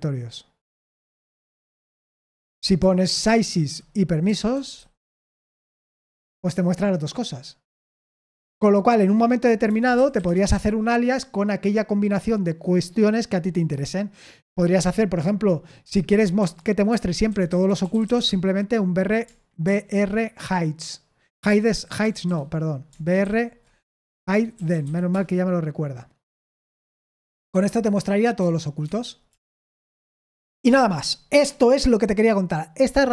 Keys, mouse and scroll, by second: 2.0 ctrl+q, 2.8 ctrl+p, 3.2-6.2 typing, 8.2 q, 9.6-10.3 typing, 15.8-18.5 typing, 19.6 ctrl+p, 21.4 ctrl+p, 22.0 BackSpace, 23.2 BackSpace, 27.5 q, 28.3 Escape, 28.8 Escape, 29.1-30.0 typing.